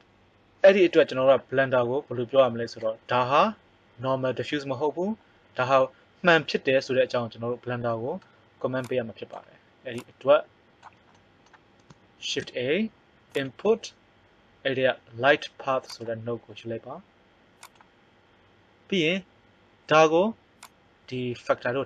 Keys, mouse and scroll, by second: 0.9-2.5 middle drag, 8.8-11.5 drag, 12.2 shift+a, 20.6 click.